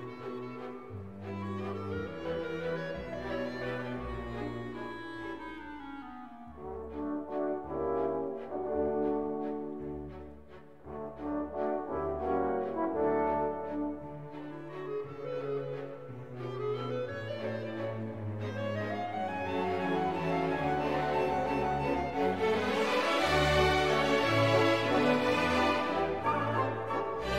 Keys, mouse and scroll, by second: 2.5 5, 3.7 BackSpace, 5.1 space, 6.2 5, 7.5 /, 8.3 5, 9.8-11.7 typing, 13.1 space, 14.1 7, 15.4 /, 16.5 7, 18.7 shift+=, 20.2-21.1 typing, 24.1 space, 25.2 /, 25.9 9.